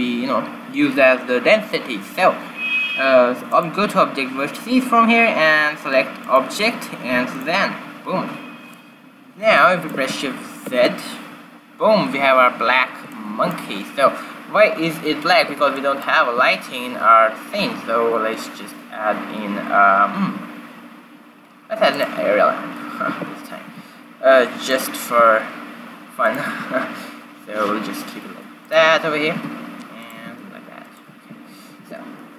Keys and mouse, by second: 3.4-5.3 drag, 6.2-8.0 drag, 9.5-11.2 middle drag, 10.7 shift+z, 13.0 middle click, 15.2 shift+z, 16.2 shift+a, 23.0 q, 23.6 g, 25.0 r, 26.4 s, 29.3 g, 30.1 r, 31.0 q, 31.9 shift+z.